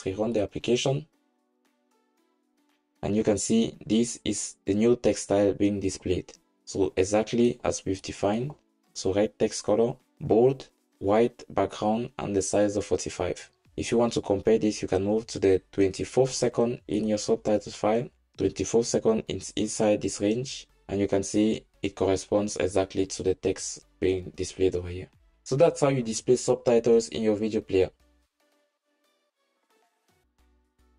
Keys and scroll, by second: 0.4 ctrl+shift+r.